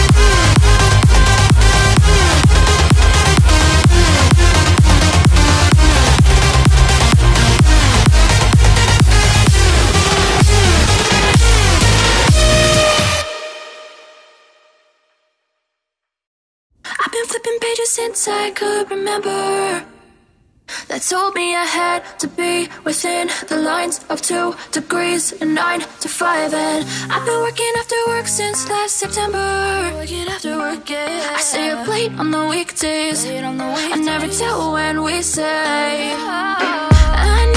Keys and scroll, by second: 0.3 ctrl+t, 8.3 ctrl+j, 31.8 ctrl+j, 32.6 ctrl+j, 35.1 ctrl+z.